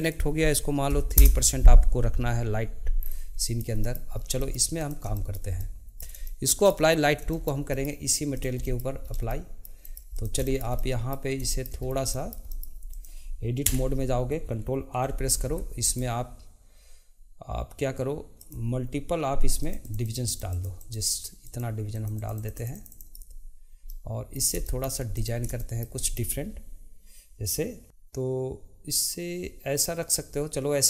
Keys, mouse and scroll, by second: 3.0 scroll down 2, 3.4-4.1 shift+middle drag, 4.1 scroll up 2, 4.4-4.8 shift+middle drag, 4.8 drag, 5.1-8.3 shift+middle drag, 8.3 click, 8.6-9.1 middle drag, 9.1 scroll up 1, 9.3-10.1 shift+middle drag, 10.1 drag, 10.4-11.8 shift+middle drag, 11.8 scroll up 1, 12.1-12.9 shift+middle drag, 12.9 click, 13.6 Tab, 15.1 ctrl+r, 19.6 click, 19.8 click, 20.0 click, 20.3 click, 20.5 click, 20.8 click, 21.4-23.9 drag, 23.9-25.1 middle drag, 25.1 click, 25.6-27.8 shift+middle drag.